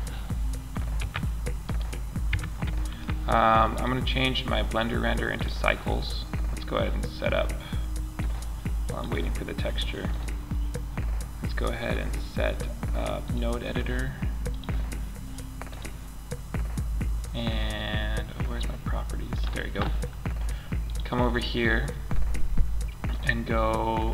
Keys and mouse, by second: 1.0 right click, 1.6 Tab, 13.8-17.2 drag, 20.2-21.2 drag.